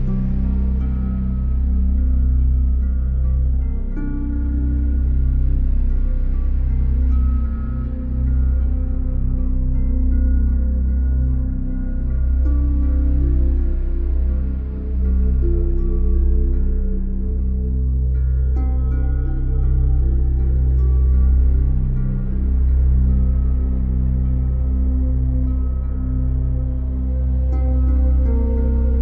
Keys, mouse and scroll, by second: 1.2 middle click, 3.0 right click, 4.2 click, 4.5 click, 5.6 click, 5.9 click, 8.7 click, 9.8 typing, 10.7 alt+right click, 11.2 alt+click, 13.5 middle click, 16.0 alt+click, 17.6 right click, 18.8 click, 23.9 alt+click, 24.5 click, 25.7 click, 26.3 Delete.